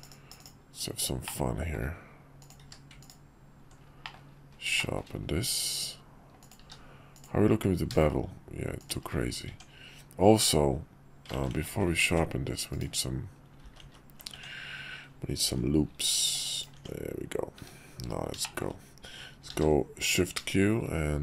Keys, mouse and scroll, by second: 1.3-1.7 middle drag, 2.4 click, 2.6 q, 4.1 middle click, 4.8 shift+middle click, 6.4 click, 6.6 q, 9.5 Tab, 12.7 ctrl+z, 12.7 click, 13.6 ctrl+z, 13.9 ctrl+z, 14.3 Tab, 15.5 ctrl+r, 16.7 Tab, 17.6 `, 18.4 shift+drag, 19.5 ctrl+q.